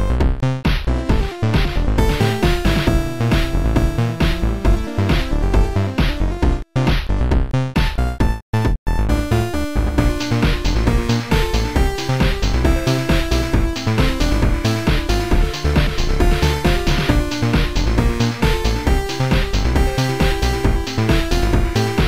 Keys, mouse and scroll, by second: 1.3 click, 2.5 Delete, 2.5 click, 3.6 ctrl+z, 3.6 Delete, 3.6 click, 4.0 click, 4.6 ctrl+z, 4.6 Delete, 4.8 click, 8.4 right click, 9.6 ctrl+z, 9.6 click, 9.6 right click, 10.0 right click, 11.6 right click, 12.6 click, 15.1 click, 15.6 click, 18.0 click, 19.1 click, 19.7 click, 20.8 click.